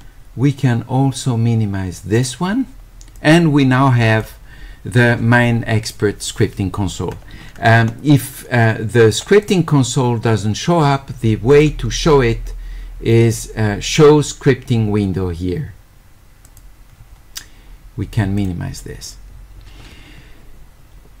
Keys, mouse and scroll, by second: 2.2 click, 3.2-4.2 drag, 8.3 click, 9.2 click, 9.4 click, 11.6 click, 16.5 click, 18.4 click.